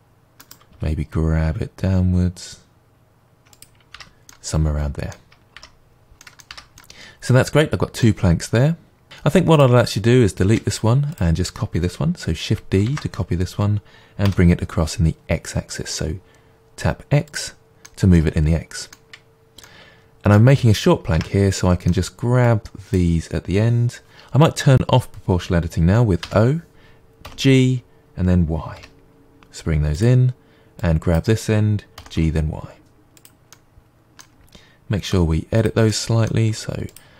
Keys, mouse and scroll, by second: 0.5 right click, 0.7 g, 3.6 click, 3.9 Tab, 4.3-9.5 middle drag, 5.5 Tab, 5.9 scroll down 2, 6.5 Tab, 9.5-10.4 drag, 10.4 Delete, 11.1-12.8 drag, 12.8 shift+d, 17.3 click, 17.7-22.4 middle drag, 21.1 Tab, 22.4-26.0 drag, 26.2 o, 27.2 g, 30.0 click, 30.8 click, 32.0 g, 33.2 click, 33.5-35.6 middle drag, 35.1 g, 35.6 click, 35.8-36.9 middle drag, 36.5 r, 36.9 click.